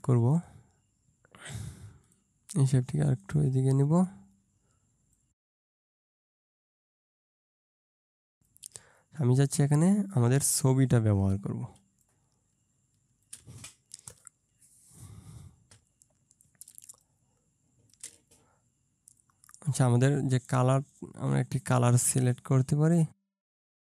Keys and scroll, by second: 6.6 ctrl+space, 11.7 ctrl+space, 16.7 ctrl+space.